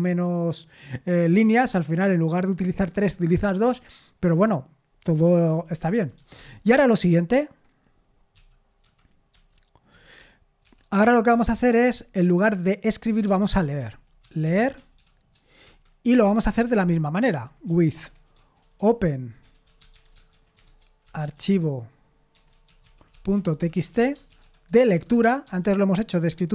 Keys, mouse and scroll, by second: 5.2-6.9 typing, 8.1-11.3 typing, 11.5 Return, 12.9-21.0 typing, 15.6 Escape, 22.1-25.4 typing.